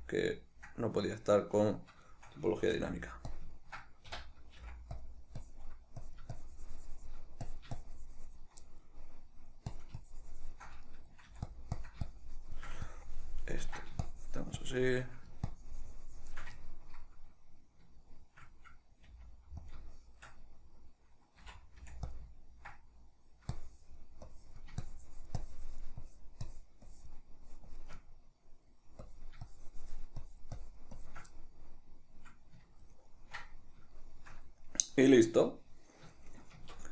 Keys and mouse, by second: 1.4 ctrl+d, 2.9 f, 3.5 click, 3.8-5.2 ctrl+middle drag, 4.3 i, 5.6-8.8 drag, 8.8-9.8 middle drag, 9.8-11.0 shift+drag, 11.0 middle click, 11.4 f, 11.9-16.8 drag, 16.8-19.9 ctrl+middle drag, 19.3 f, 19.9 click, 20.1-22.3 shift+middle drag, 21.6 c, 22.3 click, 22.5-23.7 ctrl+middle drag, 23.7-28.3 drag, 28.3 middle click, 29.2-31.5 drag, 31.5-36.9 middle drag, 36.7 Tab.